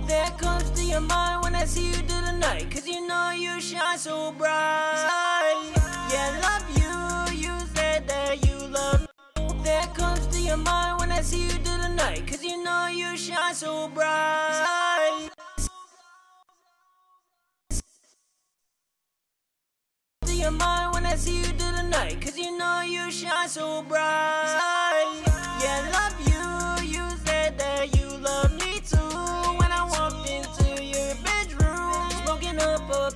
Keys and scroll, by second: 3.4 super+Tab, 7.5-8.5 typing, 7.8 F1, 8.0 F2, 10.0 ctrl+shift+-, 22.1 super+s, 22.4 super+Tab, 32.1 super+Tab.